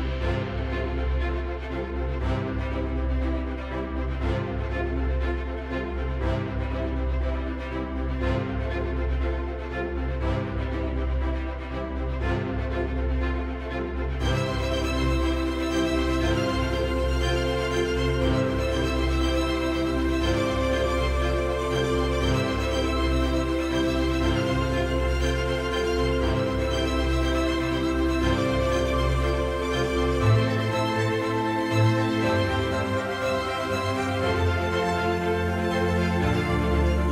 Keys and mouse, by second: 4.3-7.3 right drag, 10.9-19.9 middle drag, 25.0 click, 28.0 click, 30.6 right click, 37.0 middle click.